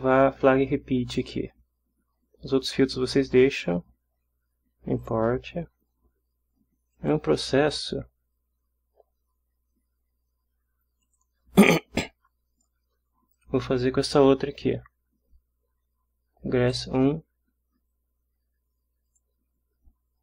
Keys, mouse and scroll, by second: 5.0 click, 6.9 click, 11.0 click, 13.3 click, 16.6 click, 19.0 click.